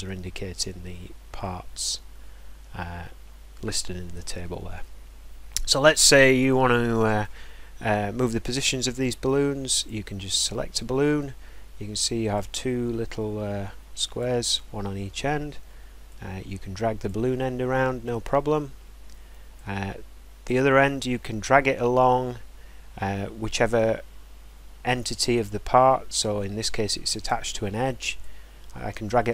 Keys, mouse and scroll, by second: 4.9-5.3 scroll down 1, 5.4 scroll up 2, 7.2 scroll, 9.9 click, 10.2-12.2 scroll, 14.1 click, 14.9 scroll, 17.0 click, 17.3 scroll, 18.1-18.6 scroll, 27.2 click, 29.0 click.